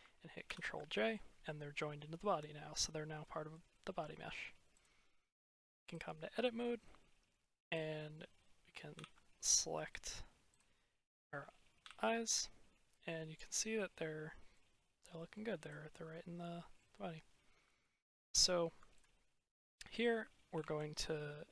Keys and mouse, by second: 0.4 ctrl+j, 2.1 drag, 3.1-3.4 middle drag, 3.6-3.9 middle drag, 4.7-5.9 drag, 6.7-7.2 middle drag, 7.5 click, 8.9 ctrl+l, 9.8 middle click, 11.7 ctrl+l, 12.9-14.4 middle drag, 15.2 middle click, 16.4 drag, 20.5 ctrl+l.